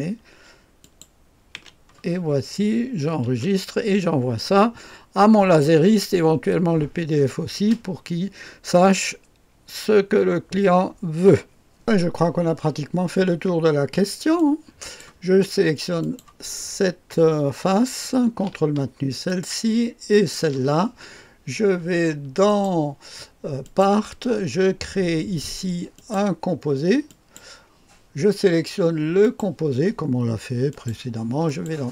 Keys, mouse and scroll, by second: 0.8 click, 1.6 Delete, 2.2-3.0 scroll down 1, 3.3 ctrl+s, 3.9-4.4 scroll down 1, 3.9 typing, 11.8 click, 12.3-14.4 scroll up 1, 14.4 click, 16.0 click, 19.3 ctrl+click, 20.1 ctrl+click, 22.5 click, 23.6 click, 26.0 click, 27.1 click, 29.2 click, 30.7 click, 31.5 click.